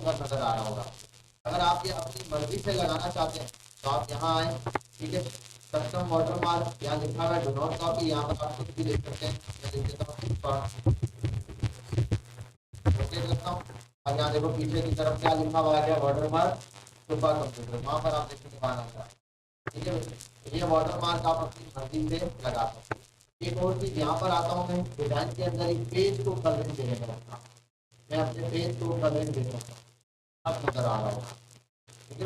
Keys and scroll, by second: 8.5 BackSpace, 9.8-11.9 typing, 12.8 Return.